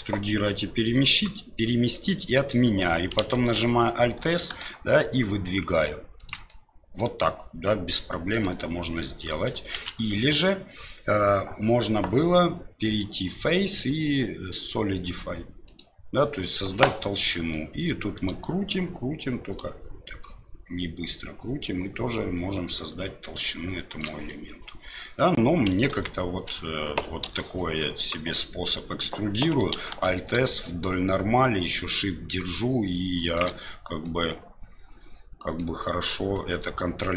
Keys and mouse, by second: 2.1 middle click, 3.3 alt+s, 6.5-8.3 middle drag, 9.7 ctrl+z, 12.8-15.8 drag, 17.6-24.0 drag, 25.9 ctrl+z, 27.2 e, 29.7 alt+s, 34.0-35.6 middle drag, 36.3-37.1 middle drag.